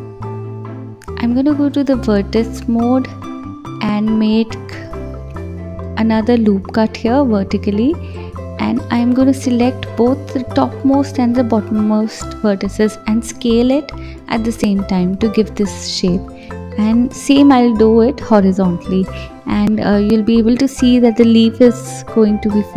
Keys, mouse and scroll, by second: 1.4-3.0 drag, 3.0 ctrl+r, 4.9 click, 6.9-8.3 drag, 8.3 s, 9.5 ctrl+z, 9.6 ctrl+click, 10.3 click, 11.7 s, 14.0 click, 15.0 ctrl+r, 16.0 click, 16.7 s, 17.9 click, 18.7 click, 19.2 click, 20.5 g, 21.6 scroll down 1, 21.9 middle click, 22.7 middle click.